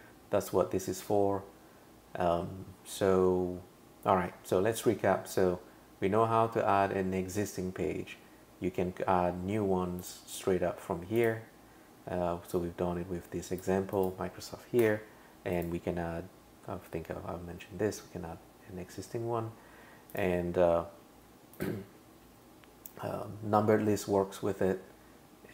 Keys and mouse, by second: 10.0 click, 11.2 click, 12.5 click, 13.9 click, 14.8 BackSpace, 15.6 click, 20.1 click, 21.6 click.